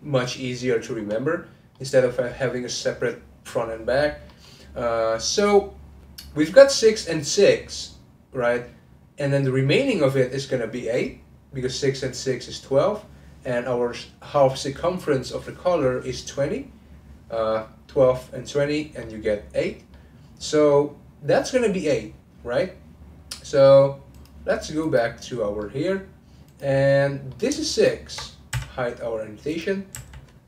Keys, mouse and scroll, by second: 0.1-0.6 scroll up 1, 0.6-1.0 scroll up 1, 1.0-1.7 scroll down 2, 1.7-5.2 middle drag, 5.2-8.4 drag, 19.0-20.2 middle drag, 20.2-20.7 scroll up 1, 20.7-23.7 middle drag, 24.1 click, 25.6 middle click, 26.5 click, 26.9 middle click, 27.7 ctrl+click, 30.0 n.